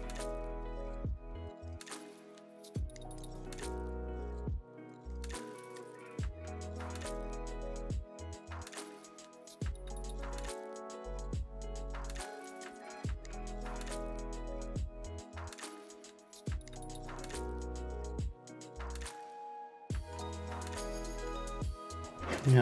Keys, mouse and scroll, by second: 0.7 click, 0.8 click, 1.4 click, 1.9 click, 2.1 click, 2.3 click, 2.7 click, 4.6 click, 4.9 click, 5.2 click, 5.4 click, 5.7 click, 6.3 click, 6.7 click, 7.1 scroll down 1, 7.3-8.5 scroll up 6, 8.8 Delete, 9.1 Delete, 11.5 click, 12.0 middle click, 12.2 click, 14.3 right click, 14.4 middle click, 14.5 right click, 16.3 click, 16.9 click, 17.4 middle click, 17.5 shift+click, 17.7 click, 18.1 click, 18.3 click, 18.5 click, 18.7 click, 19.1 click, 19.5 click, 19.6 right click, 19.7 click, 19.8 click, 20.2 click, 20.7 click, 21.4 click, 21.5 click, 21.6 ctrl+s.